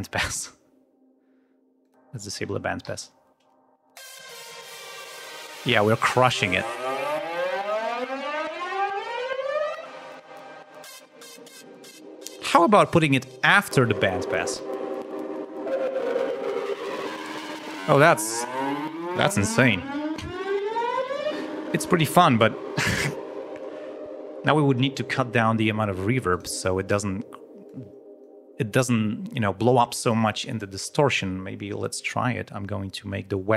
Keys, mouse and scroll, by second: 1.8 click, 2.8 l, 10.8 click, 11.9 space, 12.8-13.7 scroll up 2, 14.5 l, 21.2 space, 22.2 click, 26.3 click, 27.6 click, 33.2-33.5 drag.